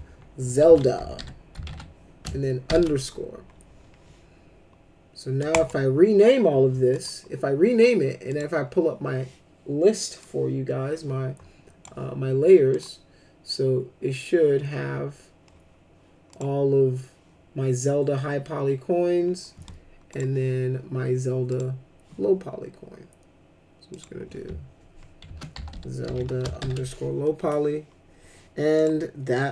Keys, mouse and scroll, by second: 0.4-2.6 typing, 5.5 click, 6.9 click, 8.2 click, 10.2-11.8 drag, 12.7 click, 16.3 click, 20.1 click, 21.5 click, 23.9 click, 25.0-27.1 typing, 28.7 click.